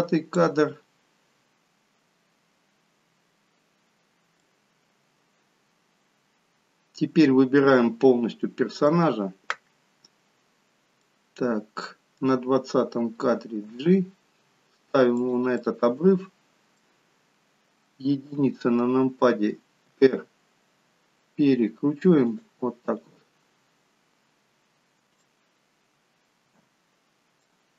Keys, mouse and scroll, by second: 4.4 middle click, 11.0 middle click, 13.7 g, 15.6 middle click, 18.3 KP_1, 20.0 r, 23.6-24.8 scroll up 1, 25.1-26.4 scroll up 1, 25.1 g.